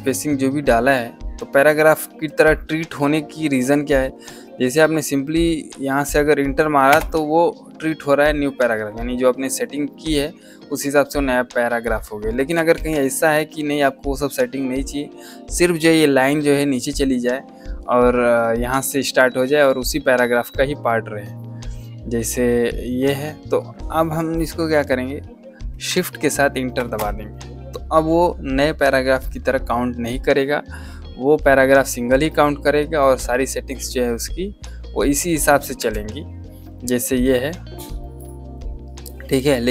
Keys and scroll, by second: 6.8 Return, 12.6 ctrl+z, 26.7 Return, 35.7 Escape.